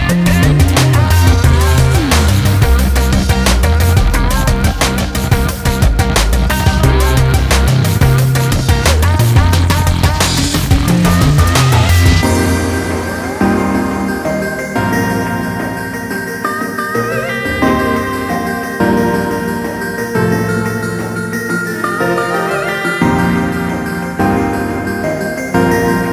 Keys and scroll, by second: 3.0 ctrl+z, 6.3 ctrl+z, 9.7 ctrl+z.